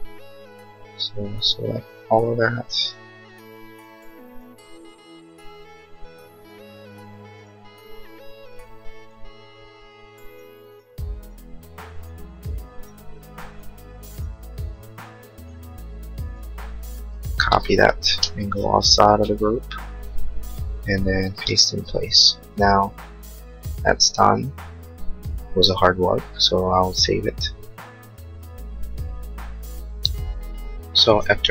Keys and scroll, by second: 17.4 ctrl+c, 19.2 Escape.